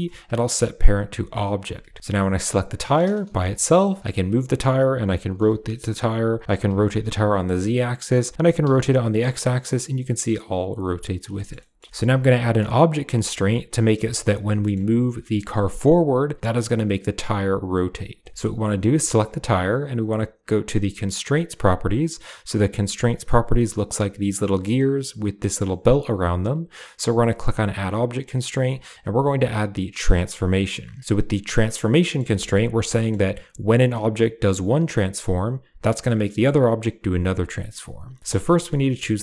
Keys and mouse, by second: 3.1 g, 4.3 g, 5.2 r, 11.2 shift+middle click, 11.4 middle click, 14.2 drag, 14.4 middle drag, 15.0 g, 18.1 shift+middle drag, 18.3 middle click, 18.7 click, 18.9 shift+middle drag, 27.5-30.0 drag, 31.0 click, 31.8 shift+middle drag, 32.2 shift+middle click, 32.8 middle click, 38.2 shift+middle click, 38.3 middle click.